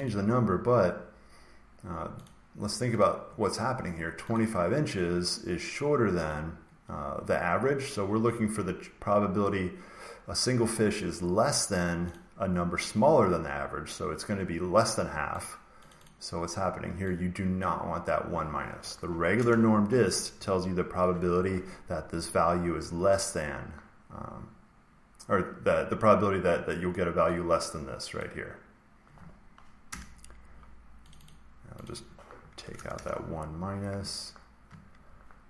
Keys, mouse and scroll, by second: 0.0 click, 2.2 click, 2.9 click, 4.3 click, 6.2 click, 12.0 click, 15.3 click, 15.8 click, 16.0 click, 17.5 click, 19.3 BackSpace, 28.1 click, 29.8 Return, 31.0 click, 31.2 click, 31.7 click, 32.6 BackSpace, 32.7 BackSpace, 32.8 Return.